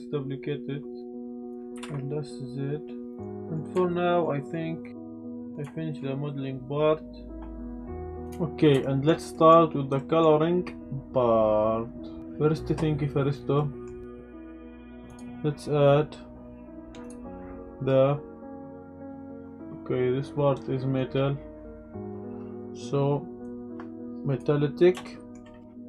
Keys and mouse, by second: 1.5 click, 1.7 s, 1.8 z, 3.1 click, 3.3 Tab, 3.3 click, 3.9-4.2 shift+drag, 4.3 middle drag, 4.7 click, 5.1 KP_Decimal, 5.4 middle click, 5.7 shift+middle drag, 6.2-8.2 middle drag, 8.3 click, 8.8 shift+middle drag, 9.3 middle click, 10.0 middle click, 13.5 middle click, 14.3 click, 15.2 drag, 17.0 click, 23.5 click, 25.0 shift+middle drag.